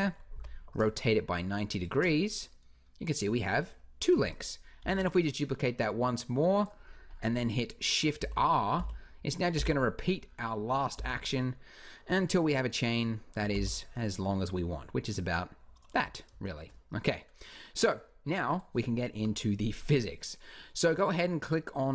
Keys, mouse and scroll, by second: 0.1 r, 1.6 click, 4.6-6.0 drag, 4.6 shift+d, 7.3 click, 8.0 shift+r, 8.6 shift+r, 9.3 shift+r, 10.8 shift+r, 13.3 shift+r, 15.8 a, 18.3-19.8 drag, 19.0 KP_Decimal, 21.3 click.